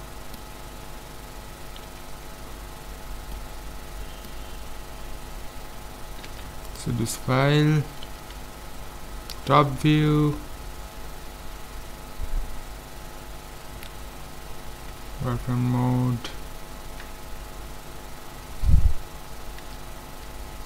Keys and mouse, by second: 1.9 KP_5, 6.2 ctrl+s, 8.1 KP_7, 11.2 KP_5, 15.1 z, 15.8 middle click, 18.3-19.7 middle drag, 19.7 a.